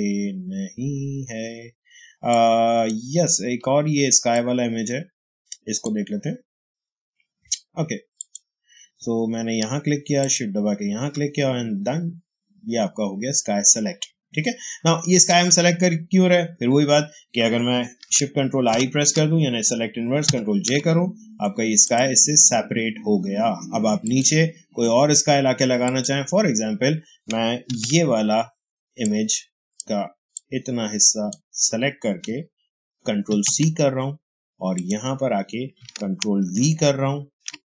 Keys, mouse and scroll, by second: 3.0-8.0 drag, 8.1 click, 15.1 click, 18.6 ctrl+shift+i, 20.2 ctrl+j, 21.7 click, 27.6 ctrl+d, 28.9-33.2 drag, 33.2 ctrl+c, 34.6 click, 36.3 ctrl+v, 37.4 ctrl+v.